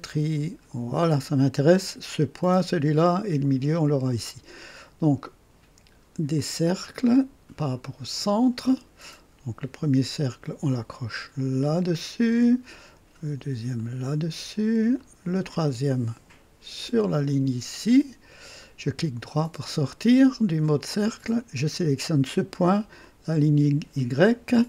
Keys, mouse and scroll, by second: 0.1 click, 6.3 click, 8.1 click, 10.3 click, 11.9 click, 13.7 click, 15.0 click, 16.8 click, 17.9 click, 18.6 right click, 21.4 click, 23.0 click.